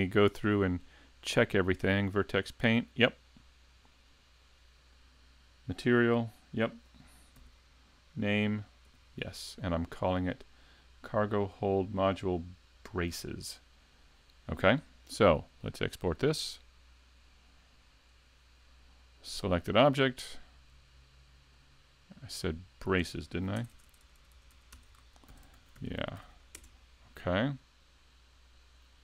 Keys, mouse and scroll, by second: 2.0 click, 3.8 click, 7.4 n, 8.9 n, 15.8 click, 28.5 click.